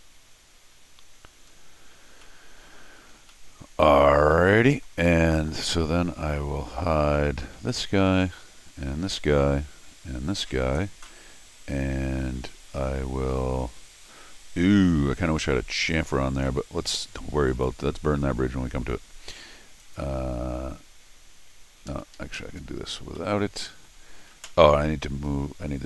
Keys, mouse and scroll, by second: 2.1 scroll down 2, 2.2 middle click, 2.8-3.2 scroll down 2, 3.3 middle click, 4.3 middle click, 5.8 middle click, 6.3 middle click, 7.5 Tab, 8.9 Tab, 10.1 Tab, 17.5 click, 19.8 click, 21.9 Escape, 22.1 Escape, 22.3 Escape, 22.6-23.1 scroll down 2, 23.1 middle click, 25.3 middle click, 25.3-25.7 scroll down 2.